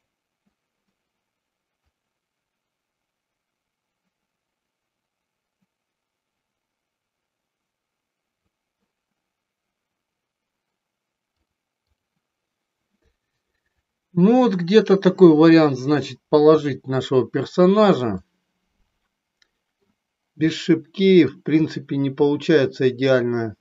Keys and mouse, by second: 2.0-8.5 drag, 11.4-12.0 drag, 18.2-20.0 middle drag, 20.6 middle click, 22.3 middle click.